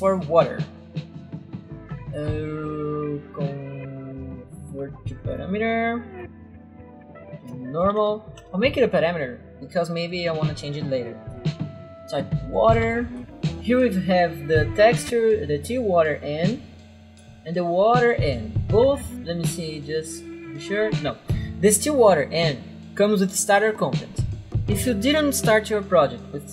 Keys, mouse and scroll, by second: 5.3 click, 7.1-8.6 typing, 8.6 Return, 10.2 click, 11.2 right click, 11.7-13.3 typing, 12.3 click, 16.8 right click.